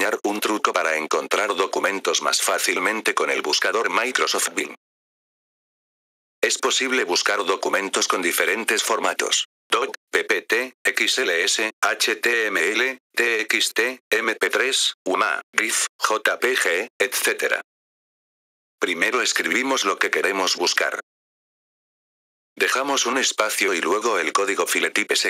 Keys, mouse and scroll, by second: 22.4 click, 23.5-25.2 typing.